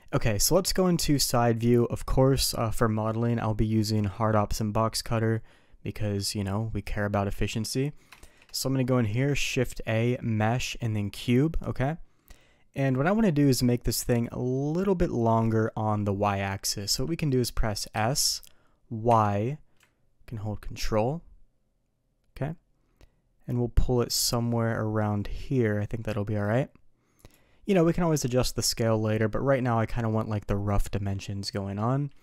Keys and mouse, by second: 8.2 shift+a, 17.9 s.